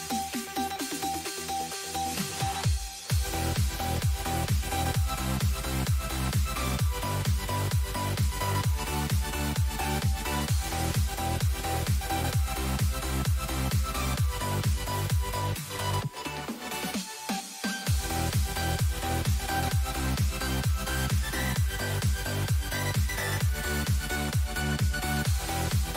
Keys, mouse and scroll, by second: 0.0-4.6 drag, 17.4-24.8 middle drag, 21.7 shift+a.